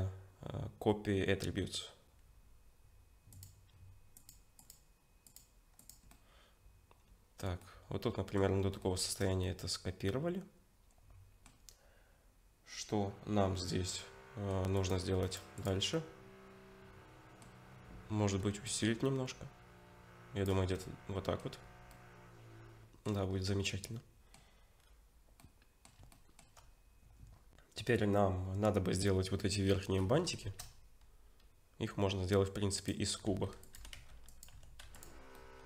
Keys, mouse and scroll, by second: 5.8 click, 6.1 middle click, 8.8 shift+middle click, 9.4 middle click, 12.7-13.9 scroll up 2, 13.9 middle click, 14.8 click, 15.2 right click, 15.9 middle click, 18.7 shift+click, 20.8 middle click, 21.5-21.9 scroll down 4, 21.9 middle click, 23.3-23.8 scroll up 4, 23.7 middle click, 24.8-25.4 scroll down 3, 25.4 middle click, 26.1 shift+middle click, 27.3-27.9 scroll up 2, 30.4 shift+a, 33.3 s, 33.8 g, 34.6 Tab, 34.9 2, 35.0 click, 35.3 middle click.